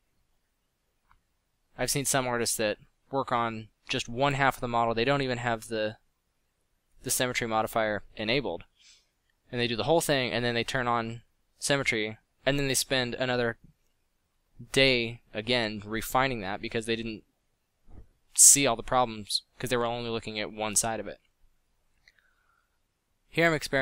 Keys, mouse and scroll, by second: 0.2 drag, 4.4-5.4 middle drag, 6.8 f, 10.9 f, 11.3 f, 18.7 f, 19.8 f.